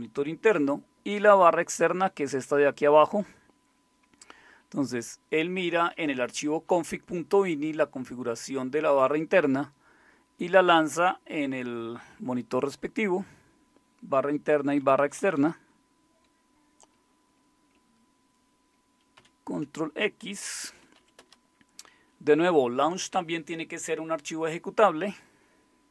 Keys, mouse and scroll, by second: 14.6 Down, 14.8 Down, 15.0 Down, 15.2 Down, 15.4 Down, 19.2 ctrl+x, 20.6-21.5 typing.